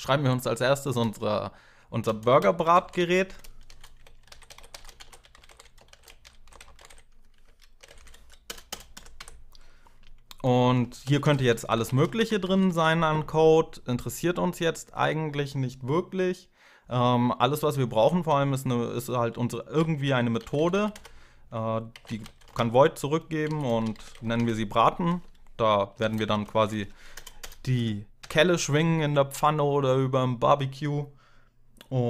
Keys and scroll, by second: 1.8 Return, 2.0-5.3 typing, 7.6 ctrl+alt+7, 7.9 ctrl+alt+0, 8.0 Left, 8.2 Return, 8.5 Return, 8.7 Up, 9.0 Tab, 10.6-13.0 typing, 17.3 Return, 19.1-26.2 typing, 26.6 Left, 26.9 Return, 27.2 Return, 27.6 Up, 28.0 Tab, 31.0 typing.